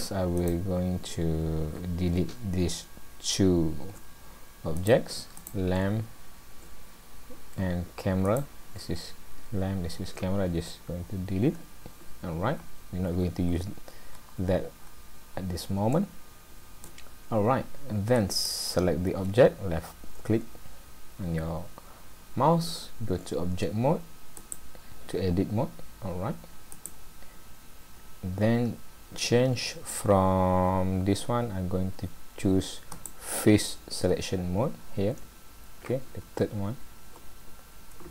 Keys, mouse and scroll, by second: 0.4 click, 4.8 click, 5.4 click, 8.3 shift+click, 11.4 Delete, 12.6 scroll down 2, 13.1-14.1 scroll up 5, 14.1-14.8 scroll down 4, 14.8-15.4 scroll up 2, 16.0 shift+middle click, 18.3 click, 24.4 click, 32.9 click.